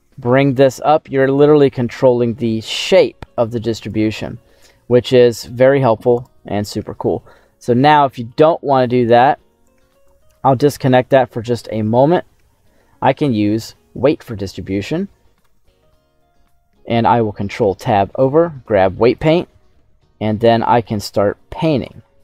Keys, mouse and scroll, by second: 3.7 click, 4.1-5.8 middle drag, 6.1 right click, 7.1 scroll down 2, 9.5 click, 11.3 middle click, 12.4 scroll up 2, 13.5 click, 15.4 ctrl+Tab, 19.1 click.